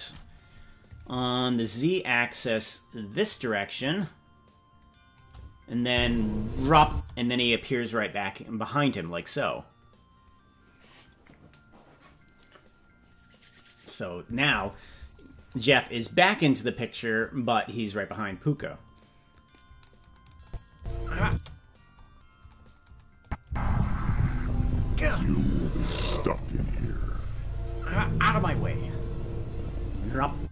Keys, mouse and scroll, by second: 2.4 click, 3.8-5.2 drag, 5.9 space, 6.9 space, 20.4 click, 20.7 space, 21.2 space, 21.6-22.4 scroll down 10, 23.2 click, 23.4 space, 30.3 space.